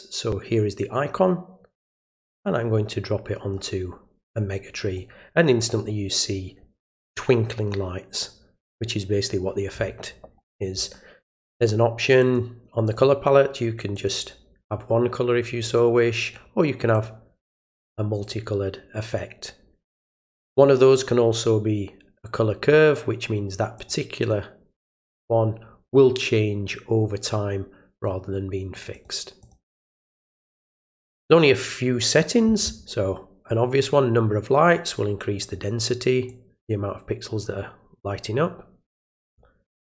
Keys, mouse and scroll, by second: 2.0-3.5 drag, 4.9 click, 12.2 click, 12.8 click, 13.9 click, 15.6 click, 16.2 click, 16.9 click, 18.2 click, 20.4 click, 23.7 click, 24.2 click, 24.7 click, 25.1 click, 27.9 click, 28.9 click, 29.4 click, 29.9 click, 33.4-35.4 drag, 36.2-39.3 drag.